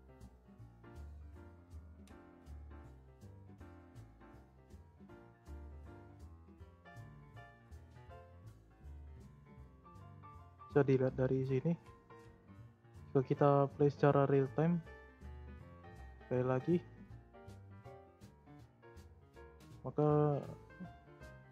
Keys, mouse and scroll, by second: 4.0-4.6 drag, 5.3 space, 6.0 space, 6.7-9.8 drag, 18.7 click, 19.3 space, 19.8 space, 20.3-21.5 drag.